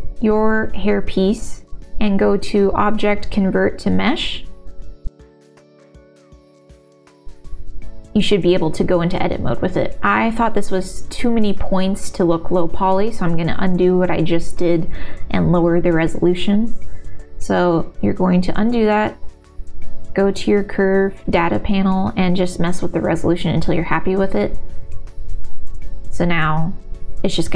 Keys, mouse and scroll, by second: 0.4-4.3 drag, 5.7 Tab, 6.4-8.3 middle drag, 9.8-12.7 middle drag, 13.5 click, 14.1 ctrl+z, 15.0 ctrl+z, 17.0 ctrl+z, 17.8 ctrl+z, 25.1 middle click, 26.8 middle click.